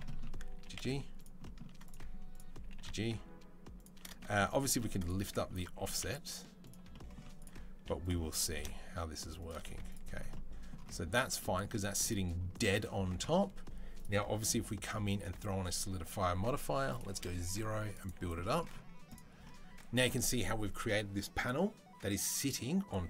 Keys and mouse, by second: 0.3 g, 2.1 click, 2.7-13.7 shift+middle drag, 5.5 g, 8.1 g, 9.5 z, 11.0 Tab, 13.7-18.9 drag, 18.9-23.0 middle drag.